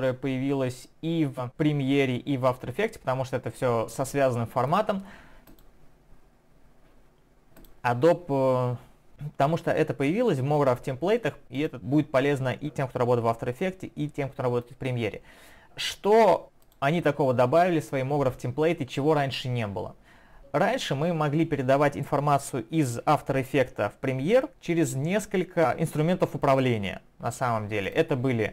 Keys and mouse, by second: 9.5 click, 11.5 click, 16.6 click, 27.9 click.